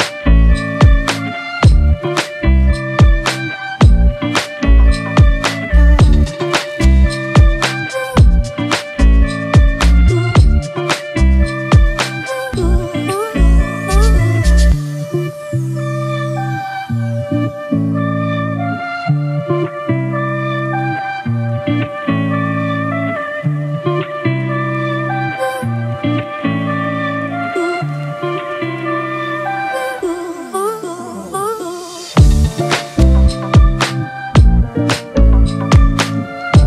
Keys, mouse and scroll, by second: 28.6 alt+click.